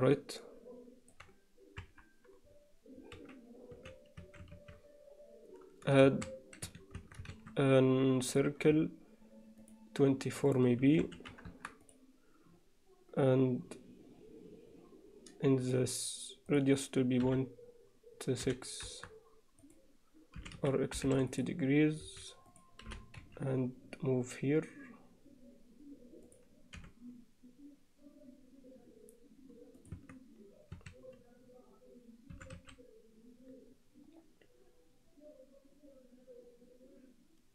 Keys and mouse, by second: 0.2-1.2 middle drag, 1.8 KP_1, 3.8 z, 4.2 a, 6.0 shift+a, 7.0 Tab, 7.4 shift+a, 9.6 click, 10.4-11.6 drag, 11.9 click, 15.6 click, 16.5-19.1 drag, 19.6 click, 20.4 r, 22.0 s, 22.9 g, 26.8 r, 30.0 Tab, 30.8 a, 32.4 e.